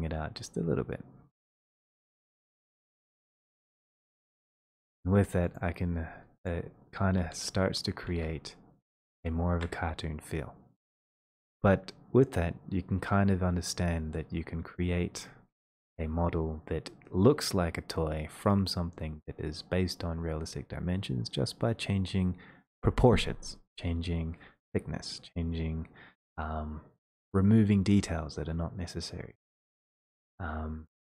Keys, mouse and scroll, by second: 5.1 shift+middle click, 5.1 click, 6.6 click, 7.5 e, 8.2 r, 8.7-9.6 r, 11.6 r, 15.2 click, 15.7 click.